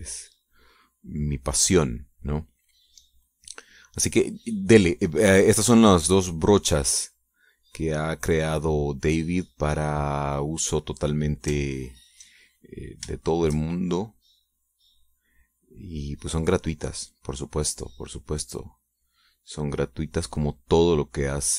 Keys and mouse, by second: 0.5-4.9 shift+drag, 7.6-10.8 drag, 12.6 ctrl+click, 13.7-21.5 shift+drag.